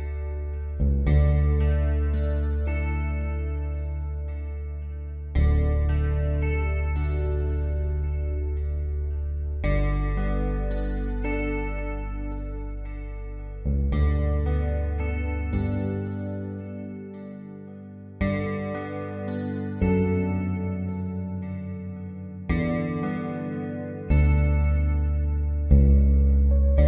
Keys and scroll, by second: 3.3-3.9 typing.